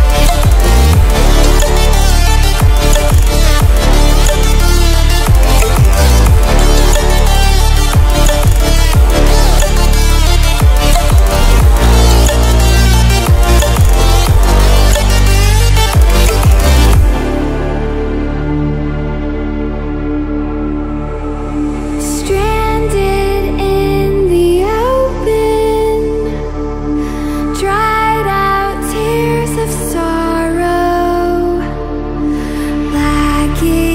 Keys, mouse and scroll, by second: 6.8 ctrl+alt+scroll up 1, 11.3 click, 14.7 click, 16.6 Escape, 18.2 click, 19.8-20.6 ctrl+alt+scroll down 2, 20.6-21.4 ctrl+alt+scroll down 1, 21.4 ctrl+alt+scroll up 2, 22.2 click, 27.7-28.4 ctrl+alt+scroll up 2, 28.4-29.3 click, 29.6 ctrl+alt+scroll down 2, 30.5-30.9 ctrl+alt+scroll up 1, 32.0-33.6 drag, 33.7 ctrl+alt+scroll up 1.